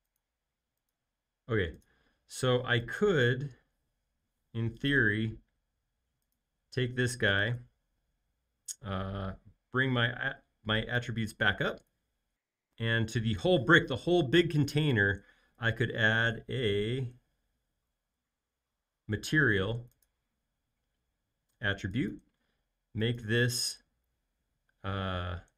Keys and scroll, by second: 2.6 m, 4.0 Escape, 6.7 alt+space.